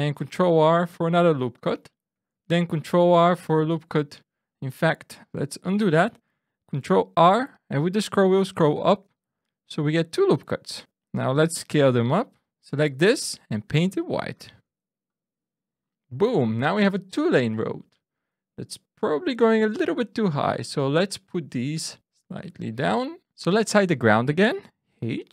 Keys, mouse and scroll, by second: 1.5 click, 2.3 ctrl+r, 4.5 Escape, 5.4 ctrl+z, 6.7 ctrl+r, 10.3 Escape, 10.8 middle click, 11.7 click, 12.5 click, 12.5 3, 14.3 click, 15.0 click, 17.2 middle click, 20.8 click, 22.0 ctrl+click, 22.3 shift+click, 23.2 ctrl+click, 25.0 h.